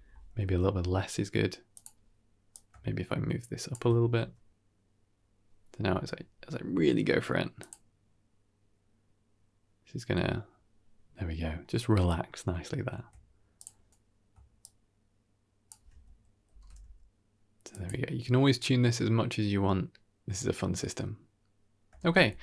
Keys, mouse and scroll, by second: 0.3 g, 2.4-3.6 shift+drag, 4.0 g, 13.4 click, 14.2 shift+space, 14.5-15.6 shift+drag, 16.4 shift+space, 16.7 g, 21.9 shift+space, 22.2 scroll down 1.